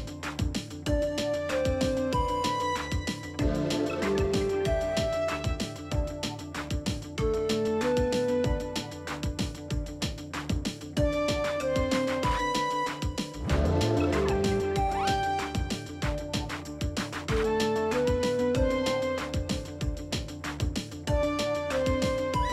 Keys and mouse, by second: 0.0 middle click, 0.4 g, 1.0-2.7 middle drag, 3.2 middle click, 3.7 middle click, 4.2 middle click, 4.5 middle click, 5.9 middle click, 6.5 middle click, 7.1 s, 7.6 middle click, 8.1 click, 8.2 middle click, 8.8 g, 9.7 middle click, 10.1 middle click, 10.7 middle click, 11.2 g, 11.9 g, 12.6 click, 12.7 middle click, 13.2 g, 13.8 middle click, 14.2 middle click, 14.8 middle click, 15.2 Tab, 15.5-15.9 middle drag, 16.1 middle click, 16.5 KP_1, 17.7 alt+z, 18.0 alt+z, 18.3 Tab, 18.9 alt+z, 20.5 a, 20.5 s, 21.4 Tab, 21.7 Tab, 22.1 alt+z, 22.4-22.5 middle drag.